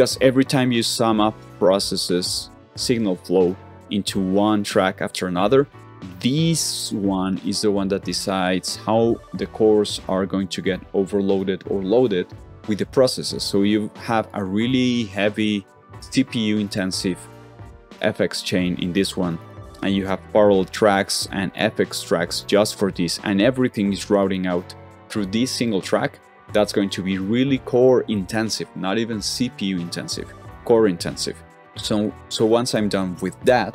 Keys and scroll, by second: 19.7 super+t, 20.3 super+t, 20.5 super+t, 30.2 super+z, 30.6 super+z, 30.9 super+z.